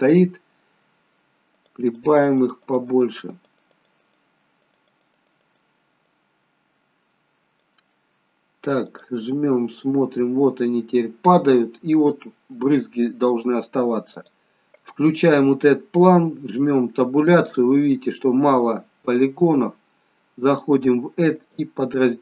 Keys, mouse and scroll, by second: 1.6 click, 1.9 click, 2.2 click, 2.5 click, 2.9 click, 3.2-5.4 click, 10.8-11.2 scroll up 1, 12.1 middle click, 14.2 click, 14.8 click, 16.6 Tab, 17.9 middle click, 20.5 click.